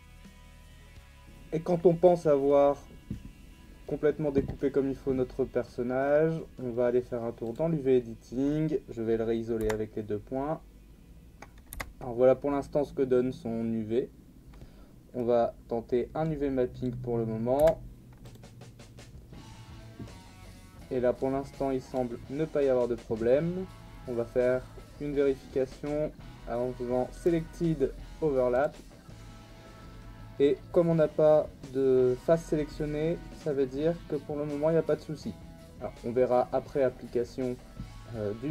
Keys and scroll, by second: 0.1 ctrl+z, 0.6 ctrl+e, 0.7 Tab, 9.6 /, 11.8 a, 17.6 u.